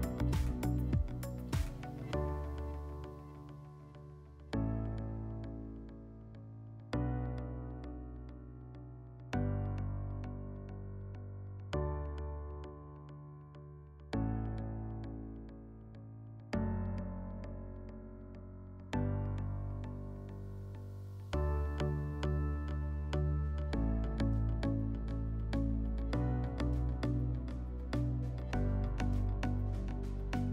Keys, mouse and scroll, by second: 1.3 click, 3.6 click, 4.7 click, 7.5 click, 8.4 click, 9.8 click, 11.3 click, 11.5 click, 11.9-13.5 typing, 15.5 click, 17.1 click, 19.7 click, 20.6 click, 21.8 click, 23.0 click, 28.1 middle click.